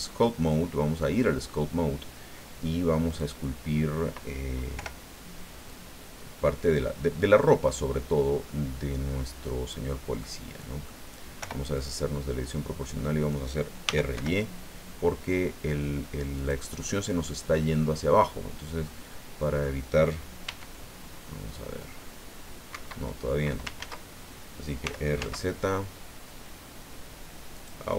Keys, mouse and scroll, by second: 3.1 click, 4.7 o, 5.6 click, 6.3-7.5 scroll up 3, 7.7 scroll up 1, 10.2 click, 11.4 o, 11.7-13.5 drag, 13.8 r, 14.1 y, 16.4 click, 17.3-19.8 drag, 20.4 e, 22.7 Escape, 23.8 ctrl+z, 24.8 r, 25.2 z, 27.5 click.